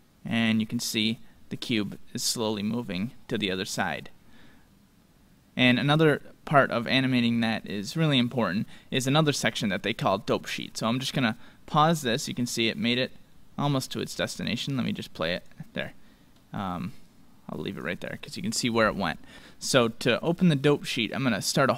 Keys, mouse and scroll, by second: 0.0 click, 11.5-13.3 drag, 14.7-19.0 drag.